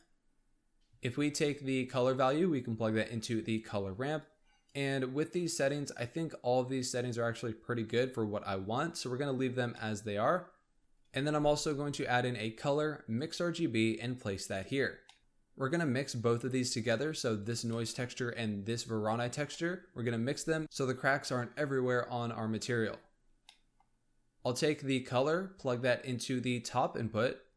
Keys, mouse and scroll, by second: 0.2-1.9 scroll up 1, 1.9 click, 4.1-7.2 drag, 8.2-9.7 drag, 9.7-10.8 middle drag, 10.8 click, 11.1 shift+a, 15.0 middle click, 15.2-16.2 scroll up 2, 16.2-16.8 scroll down 5, 16.8-17.3 middle drag, 17.3 click, 17.7-18.6 middle drag, 18.6 click, 19.4-20.6 middle drag, 23.1-23.4 scroll up 2, 23.4-24.6 middle drag, 24.6 click, 27.0-27.5 scroll up 1.